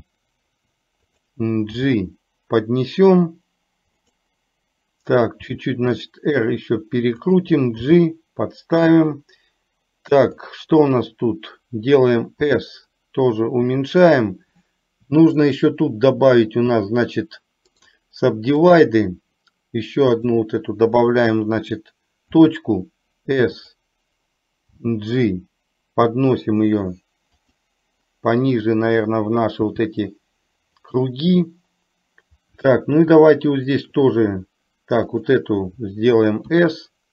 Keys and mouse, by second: 5.5 r, 7.9 g, 10.4 click, 12.5 s, 15.5 shift+click, 17.8-18.9 right drag, 20.3 click, 22.4 s, 24.9 g, 28.5 click, 29.7 g, 33.4 shift+click, 35.2 click, 36.5 s.